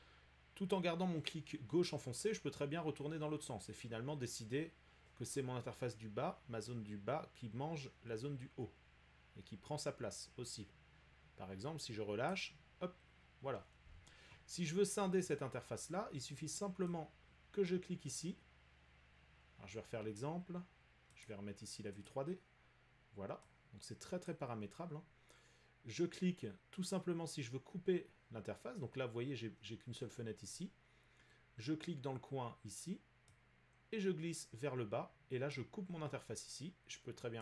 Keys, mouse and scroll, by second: 12.3 click, 20.1 click, 21.2 click, 22.1 click, 24.3 click, 29.3 click, 35.5 click.